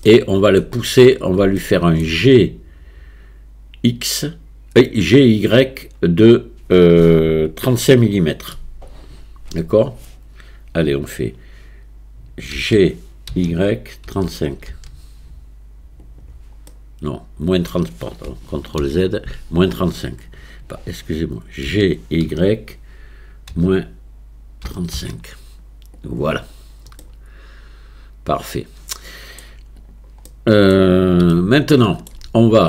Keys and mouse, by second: 0.1-0.6 shift+middle drag, 1.6 shift+middle click, 12.6 g, 16.7 click, 18.8 ctrl+z, 21.7 g, 27.1-29.4 middle drag, 29.8 click, 30.4 middle click, 31.4-32.1 shift+middle drag.